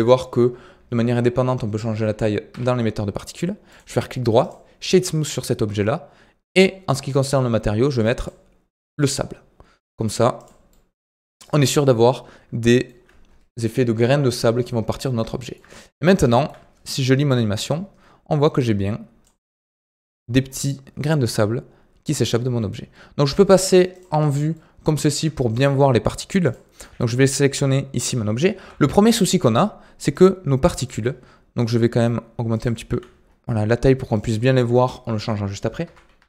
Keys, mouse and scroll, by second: 0.0-2.4 shift+middle drag, 2.4 KP_Decimal, 3.6-4.8 right drag, 4.8-10.0 scroll down 1, 10.0-11.4 middle drag, 11.4-11.9 scroll up 5, 11.9-12.8 middle drag, 12.8 scroll down 6, 14.4-14.9 scroll down 12, 15.2-15.7 shift+middle drag, 15.8-16.5 middle drag, 16.5-17.3 scroll up 4, 17.3-19.4 drag, 19.4-20.0 middle drag, 20.0-20.7 scroll up 6, 20.7-21.5 scroll down 1, 21.5-22.2 scroll down 1, 22.2 scroll down 2, 23.9 click, 24.2 scroll down 4, 24.5-24.9 middle drag, 24.9-25.3 scroll up 3, 25.3-26.4 shift+middle drag, 26.4 click, 27.7 scroll down 2, 28.5 KP_3, 30.1-31.0 drag, 31.0 scroll down 7, 31.6-32.5 middle drag, 32.5 click, 32.8 s, 34.4-34.9 middle drag, 34.9-35.8 scroll up 3, 35.8 KP_1, 36.1 KP_3.